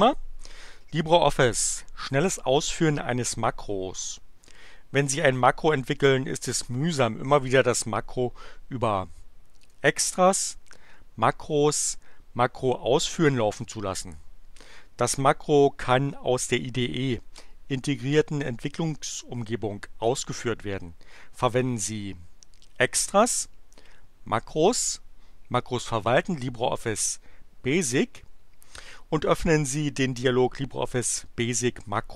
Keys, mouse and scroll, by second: 9.7 click, 26.9 click.